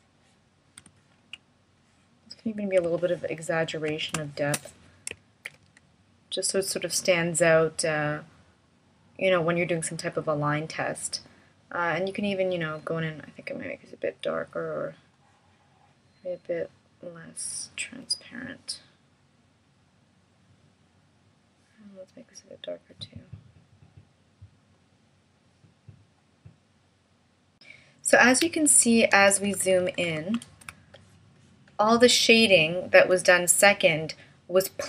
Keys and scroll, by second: 5.5 shift+m, 29.1 super+=.